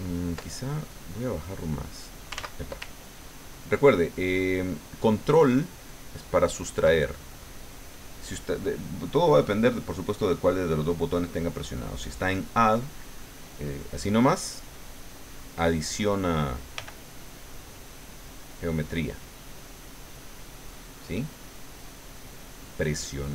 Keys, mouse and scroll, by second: 1.2-2.4 drag, 2.3 ctrl+z, 3.2-6.9 ctrl+drag, 7.1 ctrl+middle click, 9.3 click, 16.7 f, 17.3 click, 17.7-23.3 drag.